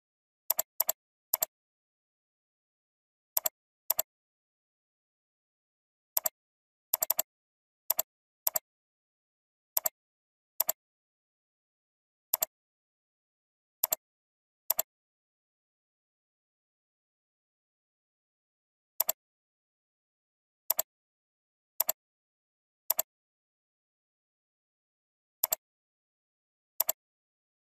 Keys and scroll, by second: 5.2 ctrl+v.